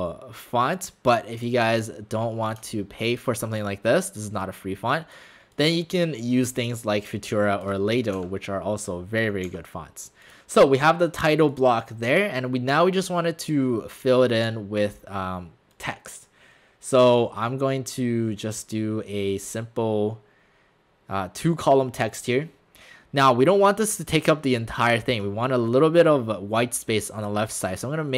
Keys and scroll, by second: 8.2 shift+w, 9.5 w.